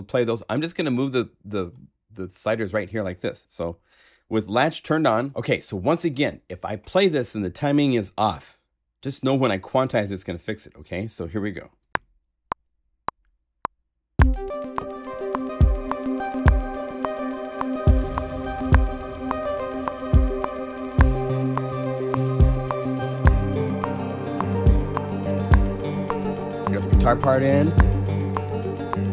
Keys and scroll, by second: 11.6 0, 11.9 *.